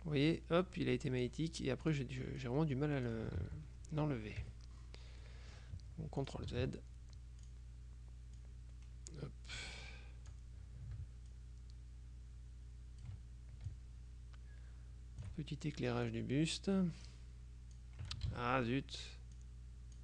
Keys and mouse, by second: 2.0 click, 3.5 ctrl+z, 4.5 KP_Subtract, 5.3 click, 6.3 ctrl+click, 6.6 ctrl+z, 7.5 click, 8.5-10.9 drag, 11.4-13.6 ctrl+shift+drag, 13.8-15.8 ctrl+shift+drag, 16.2-18.4 drag, 18.4 ctrl+z, 18.6 ctrl+middle click, 18.8 ctrl+click, 19.0 ctrl+middle click, 19.5-20.0 drag.